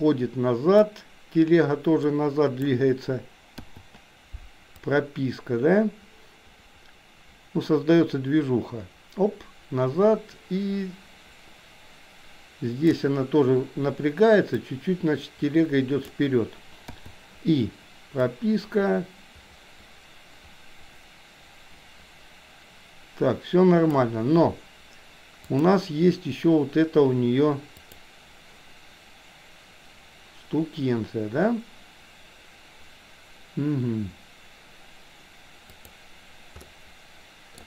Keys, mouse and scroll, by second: 0.8-2.7 drag, 4.8-13.1 drag, 14.8-16.2 drag, 18.4-24.1 drag, 25.7 click, 27.9 click, 35.8 click, 36.8-37.6 middle drag.